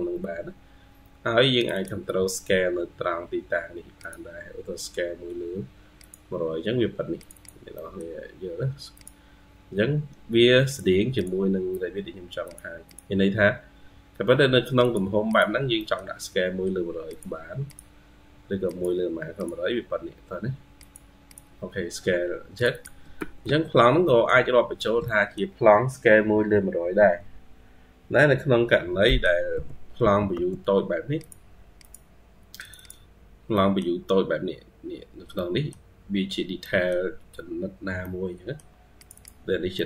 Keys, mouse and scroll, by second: 0.9 scroll up 2, 1.6 double click, 7.2 double click, 7.6 middle click, 11.0 double click, 12.7 double click, 15.1 double click, 15.7 middle click, 21.1 double click, 22.6 double click, 23.0 Escape, 23.3 Escape, 23.9 scroll up 1, 24.9 middle click, 28.6-28.9 scroll down 2, 28.9 middle click, 29.4 typing, 30.5-30.8 scroll up 1, 30.6-31.3 typing, 32.6 double click, 33.4 middle click, 34.1-34.9 scroll up 5, 35.2 middle click, 36.1 scroll down 2, 36.5 middle click, 37.7 scroll up 1, 37.9 middle click, 39.4 scroll up 1, 39.6 middle click.